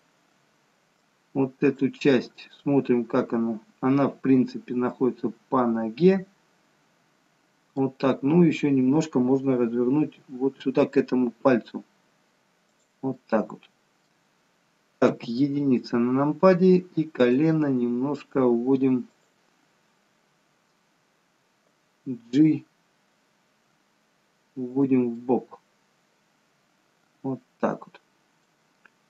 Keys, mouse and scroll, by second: 1.1 click, 2.1 middle click, 10.2 r, 13.3 middle click, 15.1 KP_1, 17.3 click, 17.7 r, 23.7 g, 25.2 middle click.